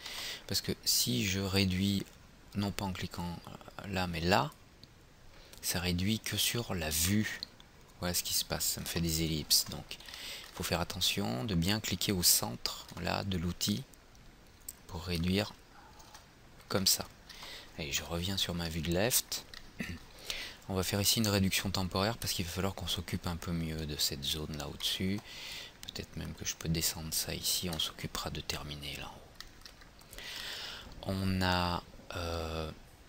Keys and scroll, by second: 0.1 ctrl+z, 9.5 ctrl+z, 16.1 ctrl+z.